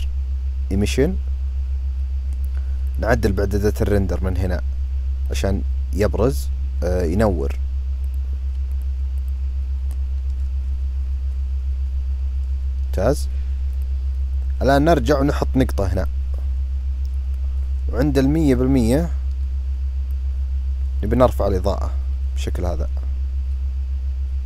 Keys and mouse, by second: 3.0 click, 5.0 click, 7.8-8.5 drag, 8.9 click, 13.5 click, 15.7 click, 17.0-19.9 drag, 20.9-24.4 drag.